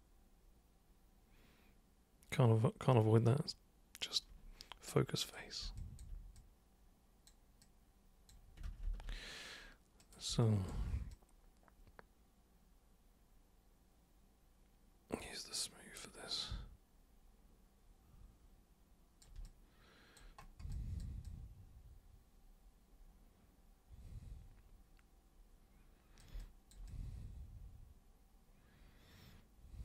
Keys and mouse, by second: 5.2 super+click, 5.8 alt+super+click, 6.4 super+click, 7.7 super+click, 8.7 ctrl+super+z, 8.9 ctrl+super+z, 10.0 super+click, 10.4 alt+super+click, 11.1-19.3 super+drag, 19.5 alt+super+click, 20.7 alt+super+click, 21.3-26.2 super+drag, 26.4 alt+super+click, 26.9-29.8 super+drag.